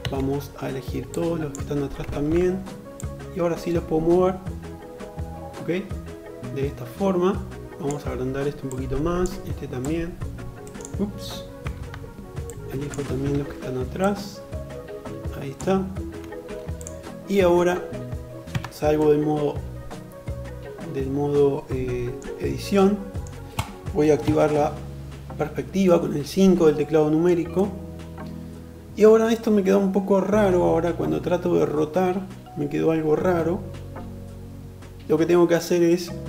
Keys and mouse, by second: 0.5-10.0 drag, 1.5 alt+z, 10.0-11.8 middle drag, 10.8 alt+z, 11.8-15.9 drag, 15.9-23.3 middle drag, 17.6 Tab, 23.3 KP_5, 23.3 KP_6, 35.4 click.